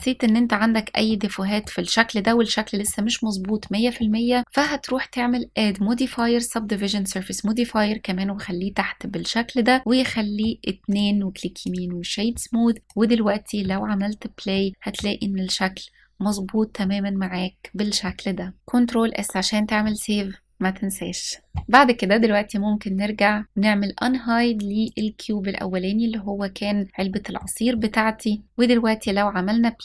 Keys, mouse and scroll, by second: 0.7-1.3 middle drag, 1.9-2.5 middle drag, 2.8 scroll down 1, 3.2 middle click, 4.4-5.9 drag, 7.4-9.3 scroll down 2, 9.6 click, 9.8 middle click, 10.5-11.4 right drag, 12.8-13.2 drag, 13.3 space, 14.2-14.7 middle drag, 16.5-17.8 middle drag, 18.6 ctrl+s, 24.5 click, 26.6-26.9 scroll down 1, 26.9 middle click, 28.2 click, 28.4 space.